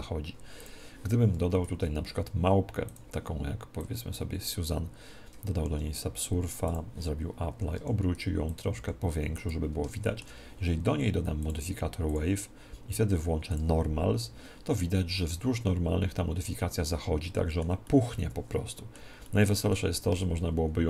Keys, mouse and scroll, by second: 0.6 click, 1.6 shift+a, 3.7 click, 5.5 ctrl+2, 6.7 click, 8.1 r, 8.6 click, 9.1 s, 9.9 middle click, 10.5-13.2 drag, 10.7 middle click, 11.3 middle click, 11.5 middle click, 13.5 click, 16.7-20.8 middle drag, 20.1 alt+a.